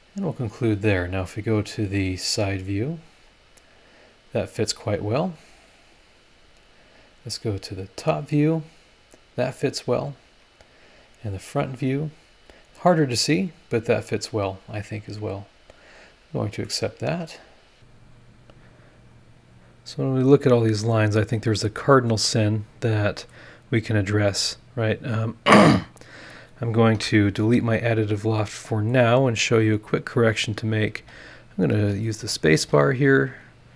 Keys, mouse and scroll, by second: 0.1-0.4 scroll down 1, 2.5 click, 3.3 scroll up 1, 7.8 click, 9.0 scroll down 1, 10.7 click, 11.3 scroll up 1, 11.8 scroll up 2, 15.8 click, 16.6 scroll up 2, 16.6 middle click, 16.7 click, 16.7 right click, 17.7 scroll down 4, 18.0 scroll up 2, 19.0 scroll up 2, 19.6-20.6 scroll down 4, 20.8 scroll up 1, 21.3 middle click, 21.3 scroll up 1, 21.4-23.5 right drag, 23.7 scroll up 1, 26.9 Delete, 27.9 scroll down 2, 28.4 click, 28.4 right click, 29.5 scroll down 2, 30.8 click, 30.9 space, 31.4 click, 31.8 space, 32.2 click, 32.5 space, 33.6 click.